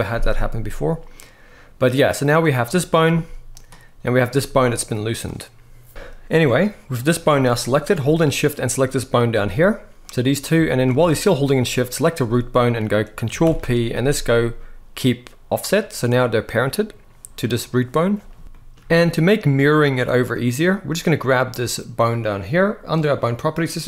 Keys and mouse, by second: 2.8 g, 4.0 g, 5.9 shift+middle click, 6.7 click, 7.0 g, 8.3 shift+click, 9.1 g, 10.4 shift+middle click, 13.1 ctrl+p, 23.4-23.8 drag.